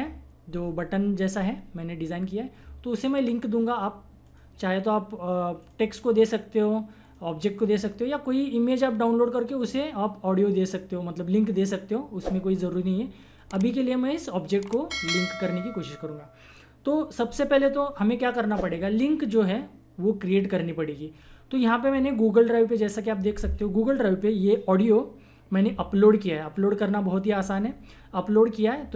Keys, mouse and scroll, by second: 4.2 click, 9.5 click, 13.2 click, 17.5 click.